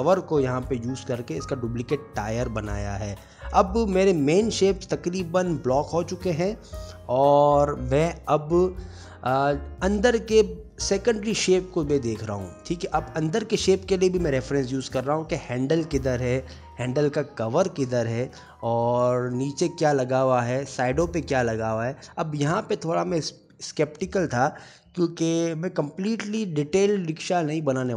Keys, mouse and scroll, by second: 0.0 click, 0.1 Tab, 0.3 ctrl+r.